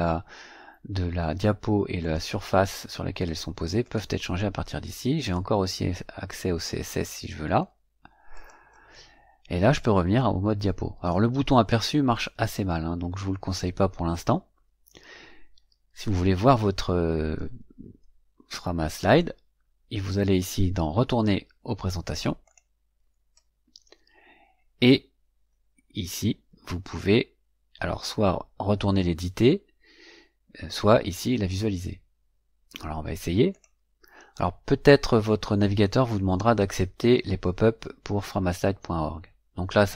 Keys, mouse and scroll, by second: 1.9 click, 3.7 click, 5.1 click, 8.2 click, 19.0 click, 22.3 click, 33.4 click.